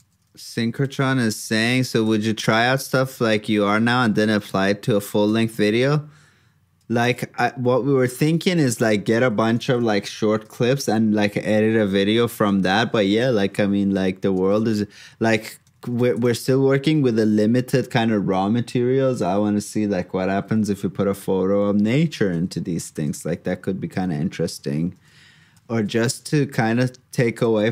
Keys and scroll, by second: 26.4 alt+shift+f.